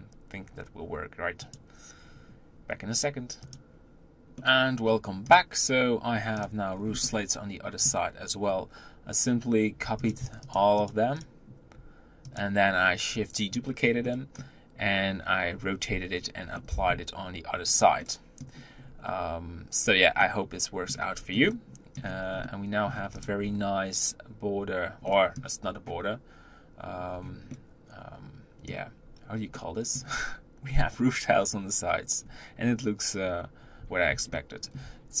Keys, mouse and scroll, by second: 3.3 scroll down 2, 4.4-6.3 middle drag, 6.3 click, 6.5 scroll down 3, 6.8-8.2 middle drag, 8.2-9.9 scroll up 2, 9.9 click, 10.6 shift+click, 10.9 shift+click, 12.2 click, 13.8-17.5 middle drag, 17.5 scroll down 1, 17.8-18.5 middle drag, 18.5-19.6 scroll up 4, 19.6-20.1 scroll down 3, 20.1-21.0 middle drag, 21.0-21.3 scroll down 2, 21.3-22.0 middle drag, 22.0 scroll down 1, 22.2 middle click, 23.0 click, 23.2-24.9 scroll up 3, 24.9-25.5 middle drag, 25.5-26.9 scroll up 3, 26.9-27.3 scroll down 1, 27.3-28.9 middle drag, 28.9 scroll up 1, 29.4-32.0 middle drag, 32.0-33.2 scroll down 2, 34.2-35.2 shift+middle drag.